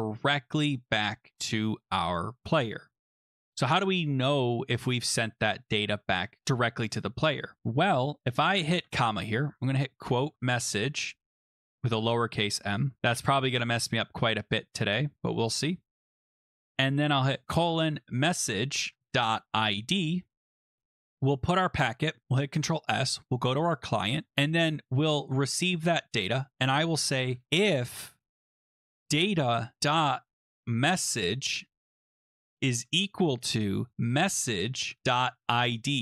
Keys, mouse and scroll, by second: 0.3 click, 2.1 click, 2.8 shift+0, 6.1 click, 6.2 typing, 8.2 typing, 8.7 Return, 9.6-11.1 typing, 11.2 Right, 11.4-11.8 Left, 12.0 Left, 12.1 Left, 12.3 Left, 12.6-13.5 typing, 14.7 Left, 15.2 Left, 15.3 Left, 15.4 Left, 15.7-20.0 typing, 21.7-22.4 typing, 21.8 click, 23.4 click, 24.1 scroll down 2, 24.4-24.8 scroll, 26.2 middle click, 26.3 click, 26.7 click, 27.3 Return, 28.1-36.0 typing, 32.9 Escape, 33.1 Escape.